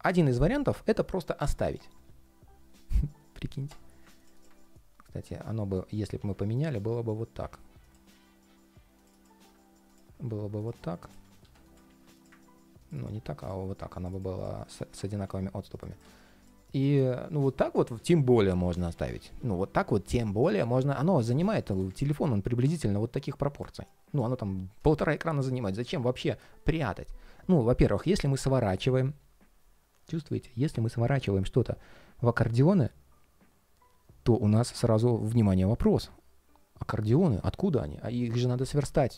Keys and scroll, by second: 5.9 super+x, 7.8 super+d, 9.1 super+v, 11.1 alt+super+c, 11.6 alt+super+v, 12.8 super+x, 15.0 super+v.